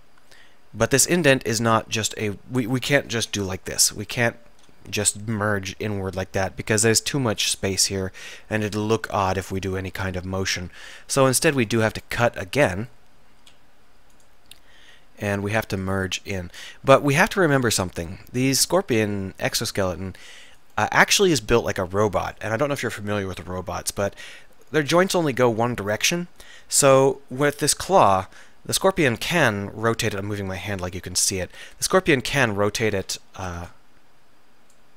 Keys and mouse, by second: 3.3 alt+m, 4.9 ctrl+z, 10.5 click, 11.5 ctrl+r, 13.4 s, 16.7 click, 17.1 middle click, 18.1 click, 18.8 middle click, 18.9-27.0 middle drag, 32.0 r, 33.1 a, 33.4 z, 33.6 b.